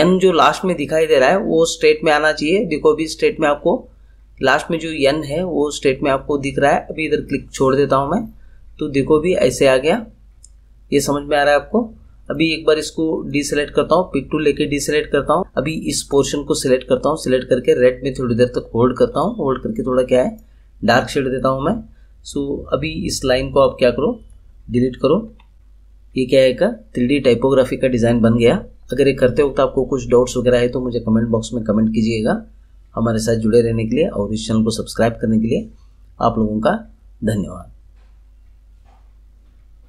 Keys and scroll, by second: 25.2 Delete.